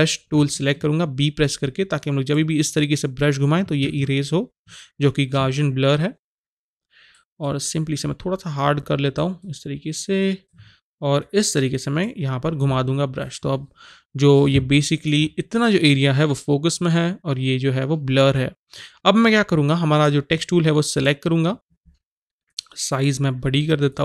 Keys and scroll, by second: 0.3 b, 3.8 ctrl+z.